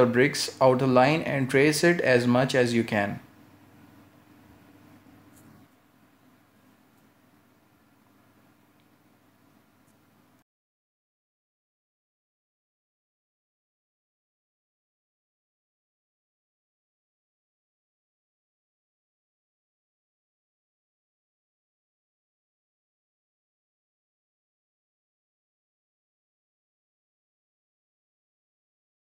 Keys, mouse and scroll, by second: 2.9 shift+middle click, 4.4 shift+middle click, 6.7 shift+middle click, 9.7 shift+middle click, 12.2 shift+middle click, 15.7 shift+middle click, 17.5 shift+middle click, 19.4 shift+middle click, 23.0 shift+middle click, 25.4 shift+middle click.